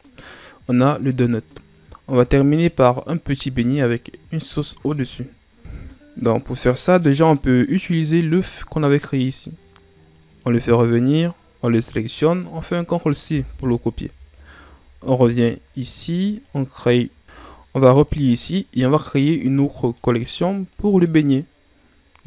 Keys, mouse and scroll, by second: 2.7-5.6 middle drag, 6.9 click, 9.1 click, 10.1 click, 11.5 right click, 13.2 ctrl+c, 15.2 click, 16.3 click, 17.2 a, 17.9 click, 19.1 click, 20.6-22.2 right drag.